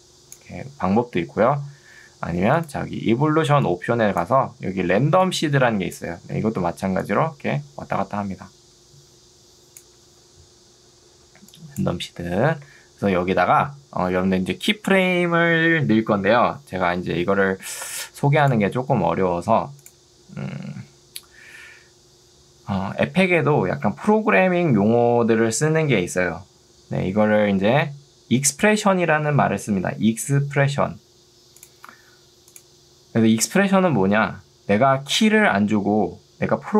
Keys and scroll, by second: 1.0 ctrl+z, 3.4 2, 6.4 Escape, 10.2 ctrl+z, 11.2 ctrl+2, 12.8 Escape.